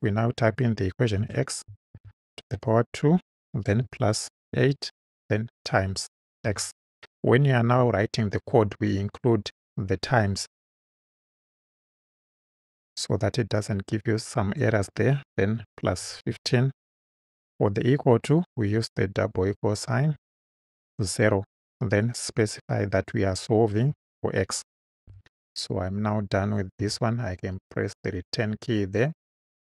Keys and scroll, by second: 1.2 x, 2.0 shift+6, 2.5 shift+2, 3.0 2, 4.5 8, 6.5 x, 16.0 |, 16.3 5, 18.8 =, 21.1 0, 22.3 ,, 23.9 x, 25.1 Right, 26.8 Return.